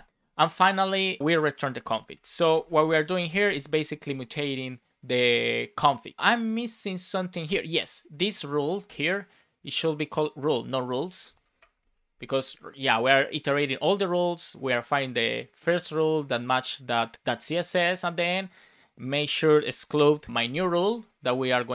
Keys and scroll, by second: 1.5 Return, 2.2 space, 3.2 super+s, 11.2 Left, 11.5 BackSpace, 11.7 super+s.